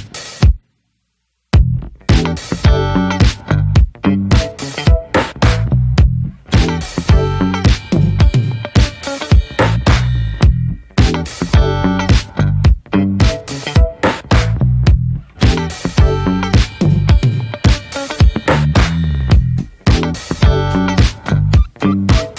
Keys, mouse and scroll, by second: 0.6 ctrl+b, 2.3-3.8 middle drag, 3.8 click, 4.0-4.5 middle drag, 4.5 shift+click, 5.3 s, 6.9-8.6 middle drag, 8.6 s, 9.4-10.0 middle drag, 10.0 scroll up 1, 10.3 middle drag, 13.1 click, 13.5 ctrl+a, 13.8 click, 14.0 scroll down 3, 14.1 middle click, 14.4 ctrl+s, 15.4 click, 15.5 scroll down 2, 15.8 click, 16.2 scroll up 2, 16.5 alt+z, 16.8-17.2 scroll up 3, 17.2-18.1 scroll down 3, 17.4 alt+z, 17.5 click, 18.3 scroll down 5, 18.5 shift+middle click, 18.9-19.9 scroll up 3, 19.1 ctrl+s, 19.9 click, 20.2 middle drag, 20.4 click, 20.6-21.0 scroll down 3, 21.3-21.9 scroll up 2, 21.9 click.